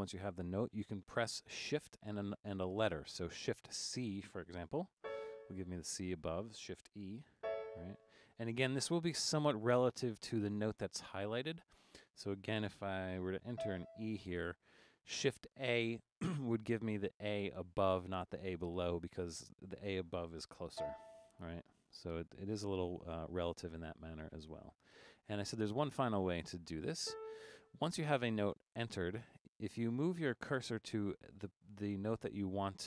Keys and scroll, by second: 5.0 shift+c, 7.4 e, 13.5 e, 20.8 shift+a, 21.8 Down, 21.9 Down, 22.0 Down, 22.2 Down, 22.3 Down, 22.5 Down, 23.4 Down, 27.0 Return, 29.2 Up, 29.3 Up, 29.5 Up, 29.7 Up, 30.1 Down, 30.3 Down, 30.5 Down, 30.7 Up, 30.9 Up, 31.4 Down, 31.6 Down, 32.0 Up.